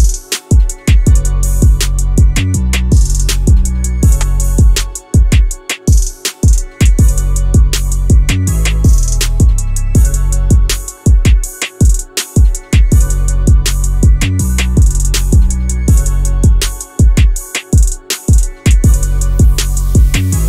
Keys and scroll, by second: 3.2 Escape, 5.1 Escape, 13.6 1, 14.1 Return, 14.6 3, 14.7 3, 14.8 Return, 15.9 5, 16.1 Return, 16.8 4, 16.9 Return, 18.2 1, 18.5 Return.